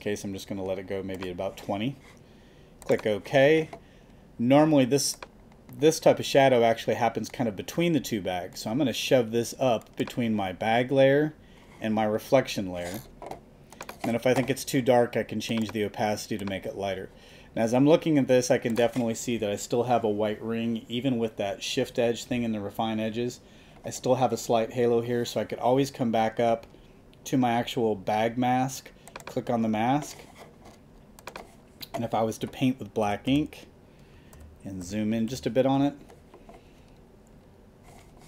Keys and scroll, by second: 33.1 ], 34.1 super+], 34.3 super+=.